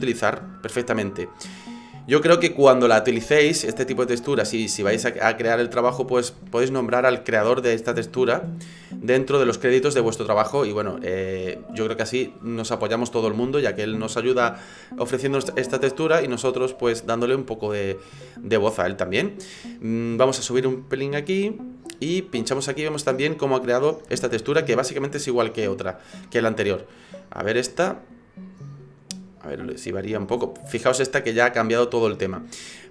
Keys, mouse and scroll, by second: 21.3 click.